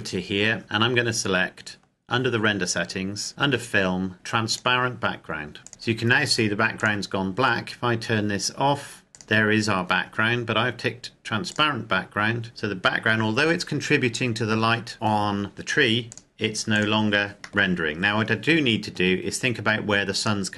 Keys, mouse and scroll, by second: 0.6-2.4 scroll down 1, 4.6 click, 6.7 click, 9.2 click, 12.0 click, 16.3 click, 17.3 scroll down 1, 17.4 middle click, 17.9 scroll down 1, 18.3 scroll up 1, 18.4-20.4 scroll down 1, 20.4 right click.